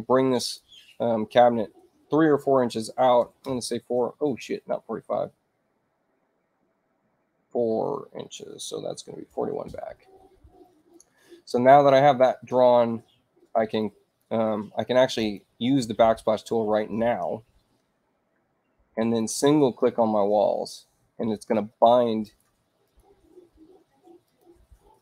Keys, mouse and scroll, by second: 0.3 Return, 3.4 Return, 5.7-6.9 drag, 6.5 Return, 9.2 4, 9.6 Return, 13.8 click, 15.2 click, 19.2 click, 22.2 click, 22.8 click, 24.2 click.